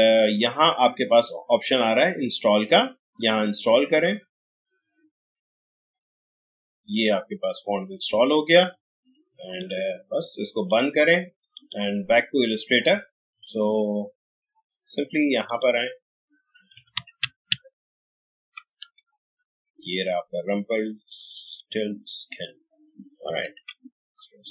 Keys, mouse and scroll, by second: 9.6 click, 13.3 alt+Tab, 15.5 click, 16.5-18.8 typing, 21.5 click, 23.7-24.5 shift+drag.